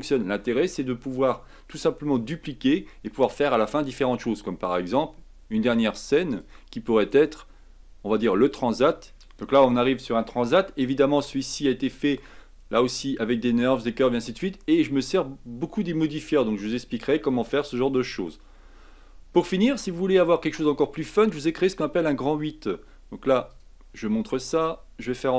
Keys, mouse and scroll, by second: 1.8 scroll down 1, 6.3-9.1 drag, 9.1 middle click, 9.4-10.3 scroll up 2, 10.3 scroll up 1, 10.3-14.4 shift+middle drag, 17.3-21.4 middle drag, 21.4 click, 25.0 click.